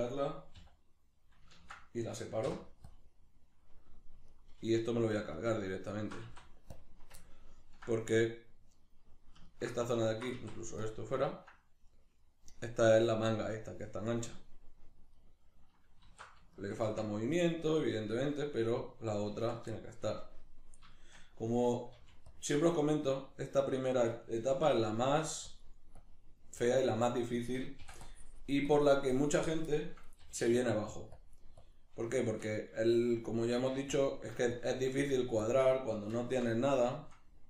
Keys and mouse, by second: 0.5 h, 4.3 alt+right click, 4.7 alt+shift+right click, 5.0 alt+shift+right click, 5.3 alt+shift+right click, 5.6 alt+shift+right click, 5.9 alt+shift+right click, 6.2 x, 7.2-10.1 ctrl+middle drag, 10.1 alt+right click, 10.3 x, 11.3-17.3 ctrl+middle drag, 16.1 alt+q, 16.9 Tab, 17.3 right click, 17.9 right click, 19.3 Tab, 20.3-22.4 shift+middle drag, 21.9 f, 22.4 click, 24.5 alt+q, 24.5 click, 25.0 shift+middle click, 25.5-36.9 drag, 27.8 i, 30.2 g, 36.1 alt+q, 36.9-37.4 shift+middle drag.